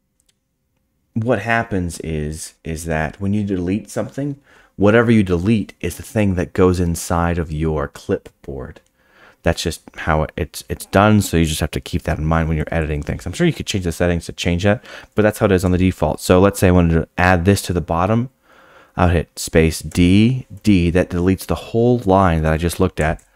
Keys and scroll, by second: 19.9 d.